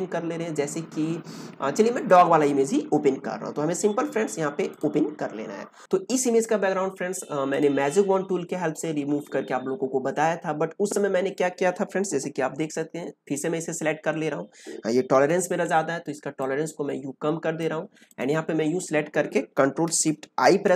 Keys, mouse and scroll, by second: 2.0 click, 4.6 click, 7.5 click, 13.2 click, 15.1 ctrl+d, 16.4-18.0 drag.